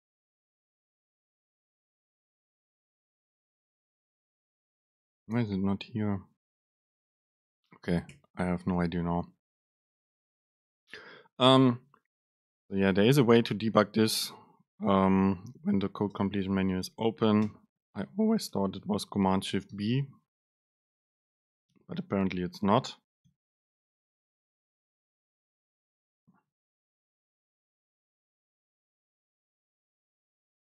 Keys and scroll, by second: 16.4 super+space.